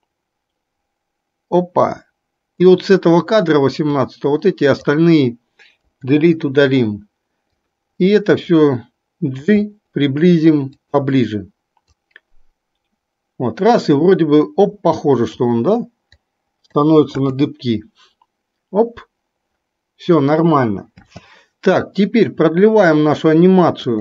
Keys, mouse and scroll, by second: 14.0-16.9 drag, 17.4 space, 21.1 space, 23.9-24.0 drag.